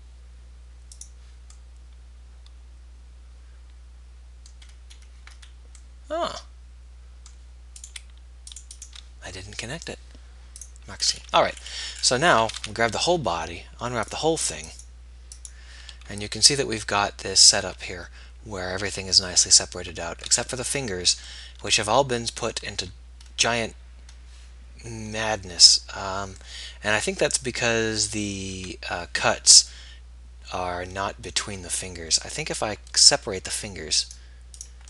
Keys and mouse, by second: 1.2 right click, 2.9 middle click, 8.0-12.5 right drag, 12.5 middle click, 12.7 a, 24.7-34.3 middle drag, 34.3-34.8 right drag.